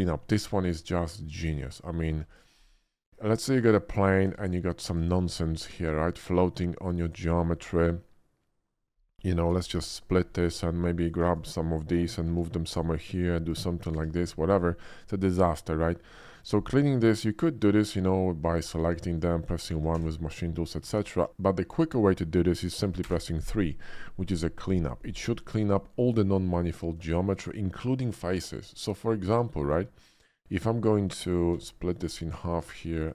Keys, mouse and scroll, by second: 1.3 click, 1.9 middle click, 2.3 shift+a, 3.6 click, 4.1 Tab, 5.2 click, 5.7 right click, 6.9 click, 9.5 shift+r, 9.7 shift+r, 10.5 Tab, 11.0 click, 12.1 shift+d, 12.7 click, 13.9 e, 14.2 click, 14.7-15.9 middle drag, 17.0 middle click, 18.4 click, 19.2 ctrl+click, 19.9 1, 20.8 ctrl+z, 23.1 3, 27.1 shift+middle click, 28.3 Tab, 31.5 ctrl+r, 31.9 click, 32.6 Tab, 32.9 click.